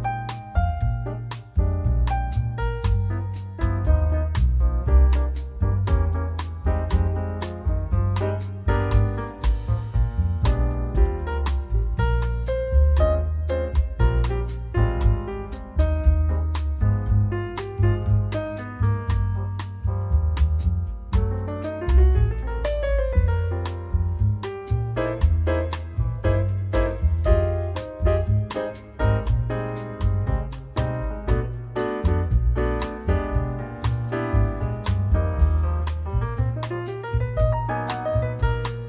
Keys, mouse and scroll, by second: 2.5 click, 6.6 click, 15.7 click, 17.6 click, 18.9 click, 21.2 click, 23.0 click, 27.3 click, 29.2 click, 30.5 click, 35.4 click, 35.8 click, 36.6 click, 37.2 click.